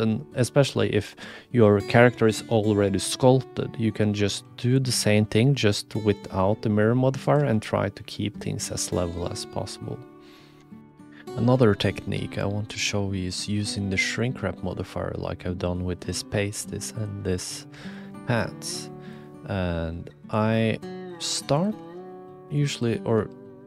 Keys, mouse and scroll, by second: 4.7 click, 7.2 click, 10.8 ctrl+alt+KP_1, 12.7 click, 16.3 click, 16.3 middle click, 16.3 right click, 16.9 click, 17.8 shift+click, 18.1 click, 20.4-21.2 drag, 22.0 shift+a, 23.1 s.